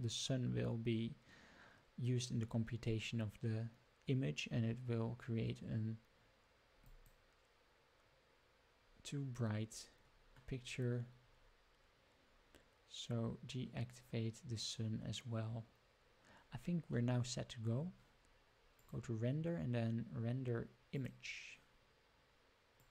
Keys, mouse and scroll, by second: 18.7-22.9 drag.